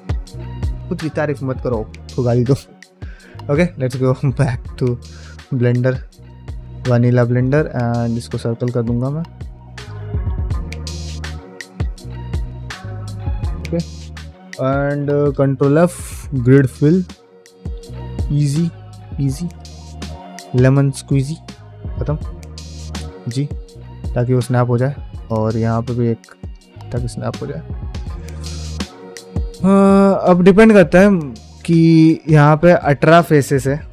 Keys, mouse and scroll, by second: 6.0-10.0 right drag, 10.0 r.